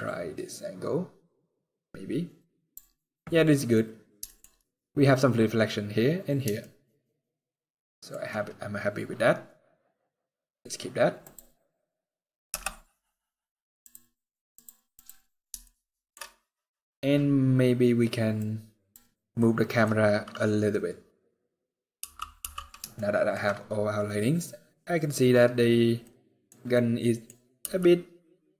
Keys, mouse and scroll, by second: 11.0 click, 11.0 scroll down 4, 12.2 KP_0, 13.5 click, 15.3 shift+middle click, 15.9-16.5 scroll up 1, 18.1 click, 19.1 middle click, 19.6 scroll down 2, 20.8 scroll down 1, 21.7 t, 22.1 t, 22.6 shift+middle click, 23.4-23.8 scroll down 1, 25.7 middle click, 26.5 middle click, 27.1 scroll down 1, 27.3 g.